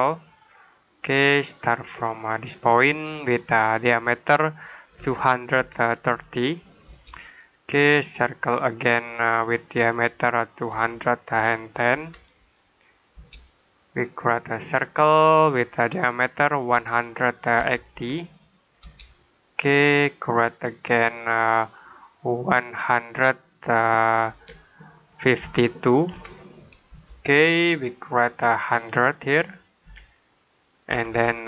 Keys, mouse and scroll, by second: 2.7 click, 4.8-6.0 typing, 6.7 Return, 8.5 click, 10.6-11.8 typing, 13.0 Return, 14.2 click, 16.6-17.8 typing, 18.7 Return, 20.4 click, 24.1-25.9 typing, 26.8 Return, 28.1 click, 29.7 typing, 30.7 typing.